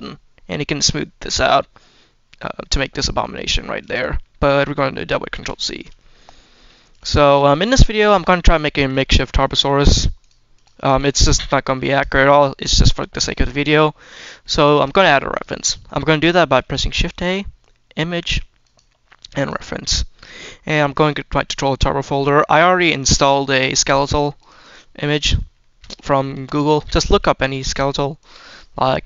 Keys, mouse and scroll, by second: 3.9 middle click, 5.2 ctrl+z, 5.8 middle click, 6.8 click, 8.0 click, 8.5 shift+middle click, 10.1-10.5 drag, 10.8 click, 11.8-13.0 drag, 14.5 shift+middle drag, 15.2 click, 16.8 shift+a, 25.0-25.4 scroll down 2, 25.5 shift+middle drag, 26.2 s, 26.6 click, 27.5 g, 28.0 click.